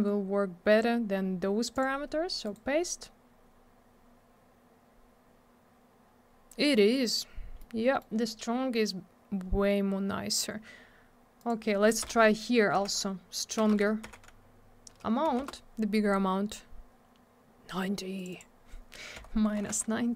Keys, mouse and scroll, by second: 1.7 click, 1.8 click, 2.4 right click, 2.5 right click, 4.3-5.5 scroll up 1, 7.6 middle click, 11.4 click, 11.5 click, 12.0 BackSpace, 12.8 9, 13.6 BackSpace, 14.0 9, 15.4 Return, 18.2 click, 18.2 click, 18.3 click, 18.4 click.